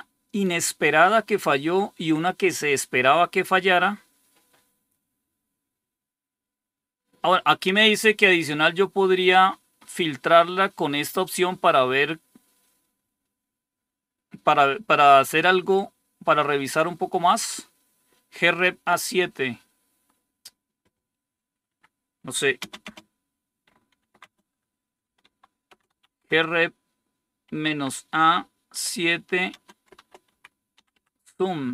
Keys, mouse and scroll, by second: 4.6-9.4 scroll down 3, 9.4-14.5 scroll down 1, 14.5-15.6 scroll down 4, 21.5 Home, 22.5 shift+space, 23.8 Tab, 24.1-28.0 typing, 29.4-31.3 typing.